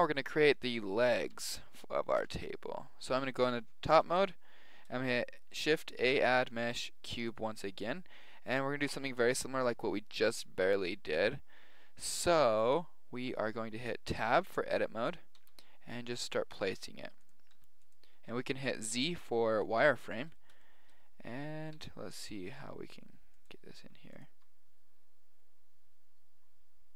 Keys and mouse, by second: 1.2 KP_7, 2.2 KP_1, 3.1 KP_7, 3.8 middle click, 6.0 shift+a, 14.2 Tab, 15.3 g, 16.6 s, 17.6 g, 18.1 z, 19.3-20.8 middle drag, 21.7 s, 22.3 g, 23.8 s, 24.3 g, 25.6 click, 25.6 right click.